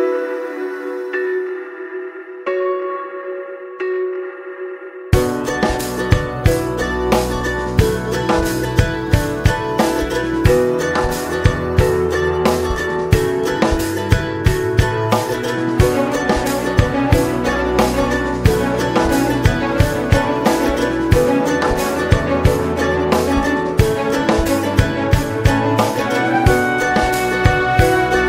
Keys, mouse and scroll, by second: 3.1 space, 4.2 space, 5.1 click, 5.6 middle click, 5.9 scroll up 1, 7.3 /, 7.6 /, 7.7 scroll down 2, 8.0 middle click, 8.3 click, 8.7 scroll down 2, 8.9 middle click, 9.3 space, 10.4 space, 11.2-12.5 drag, 15.0-19.4 drag, 19.7 middle click, 20.0 click, 20.3 space, 22.4-23.6 middle drag, 23.6 space, 24.6 click, 25.0 middle click, 25.5-26.5 drag, 26.5-27.1 scroll down 3, 27.1-28.2 scroll down 6.